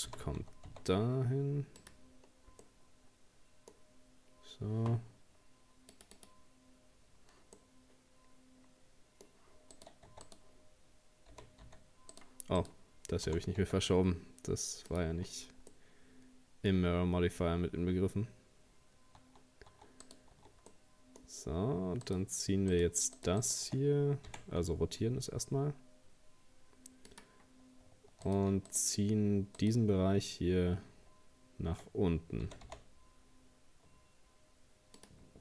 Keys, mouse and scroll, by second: 0.1 g, 2.2 scroll down 2, 2.6-3.9 middle drag, 3.9 scroll up 1, 5.9-7.6 drag, 7.6-9.8 middle drag, 9.8 right click, 10.1 Tab, 10.3 right click, 11.3 g, 12.6 right click, 13.3 g, 15.2-15.7 scroll down 1, 15.7-16.9 middle drag, 16.9-19.2 scroll up 1, 19.2 Tab, 19.7 Tab, 20.0 right click, 20.4 Tab, 20.6 scroll up 1, 20.7-22.1 middle drag, 22.1 right click, 22.7 shift+right click, 23.2 shift+right click, 23.4 shift+right click, 24.3 r, 28.3 right click, 28.7 shift+right click, 29.6 shift+right click, 32.4 g.